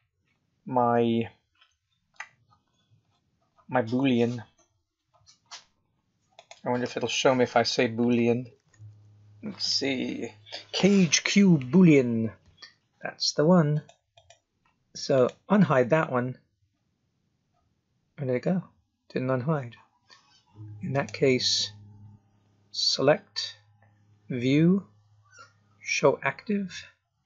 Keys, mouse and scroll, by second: 0.7 scroll up 2, 1.0-3.8 scroll down 54, 4.1-5.0 scroll down 6, 5.0-6.3 scroll up 12, 6.3 click, 8.2 o, 14.1 click, 15.1 click, 16.1-17.5 scroll down 9, 17.5-18.0 scroll up 6, 18.0 scroll down 2, 18.4-19.8 scroll up 1, 19.8-20.6 scroll up 1, 20.9 right click.